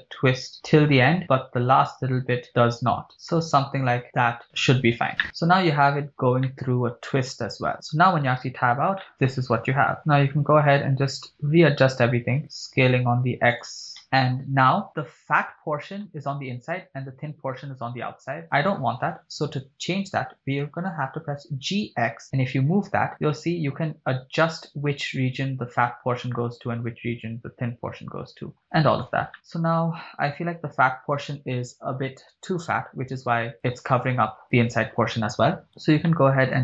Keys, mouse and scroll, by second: 0.4 scroll down 1, 0.9-1.4 scroll up 1, 2.5 shift+scroll down 1, 3.7-4.0 shift+scroll up 1, 4.0-4.4 shift+scroll down 1, 4.7 shift+click, 5.1 scroll down 1, 5.2 middle click, 6.0-6.6 scroll up 3, 6.5-7.7 middle drag, 8.5 Tab, 9.0-10.0 middle drag, 13.6 shift+click, 14.0 middle click, 14.0 scroll down 1, 14.9-15.4 middle drag, 14.9 scroll down 2, 16.1 middle click, 18.4 middle click, 21.4 g, 21.9 x, 29.0 click, 29.3-30.5 middle drag, 35.7 Tab, 36.1 shift+middle click.